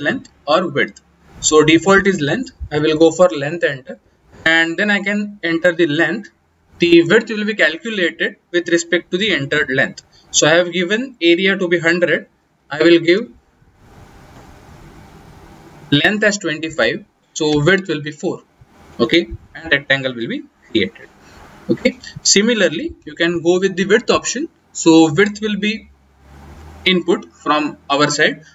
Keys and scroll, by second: 2.7 l, 3.1 Return, 13.0 BackSpace.